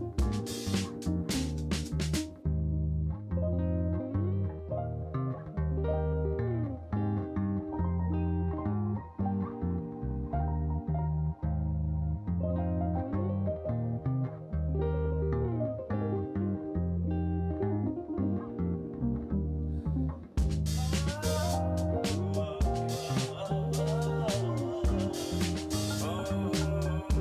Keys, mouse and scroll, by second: 2.4 click, 4.7 KP_7, 5.7 shift+d, 7.2 KP_0, 10.1 ctrl+s, 11.8 click, 16.0 click, 17.5-18.1 drag, 18.5-19.1 drag, 19.6 click, 20.3 click, 21.0 0, 22.2 click, 22.8 0, 23.5 click, 24.0 click, 24.6 click, 25.2 click, 26.4 click, 26.6 click, 27.1-27.2 drag.